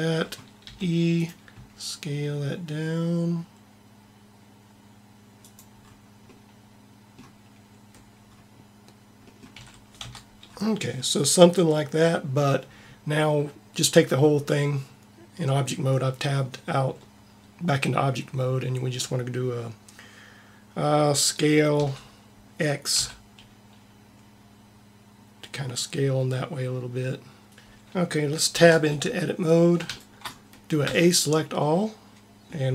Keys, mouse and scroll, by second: 0.5 e, 1.0 click, 1.4 s, 9.5 a, 10.0 Tab, 21.6 s, 27.5 t, 28.5 Tab, 30.8 a.